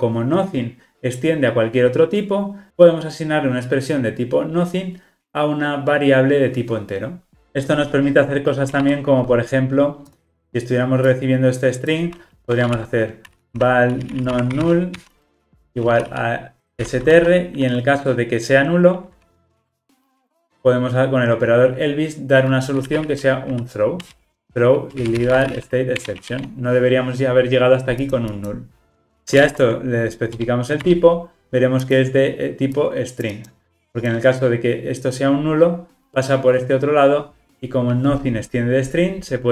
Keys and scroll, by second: 24.1 Return, 29.4 alt+Return, 34.8 Return.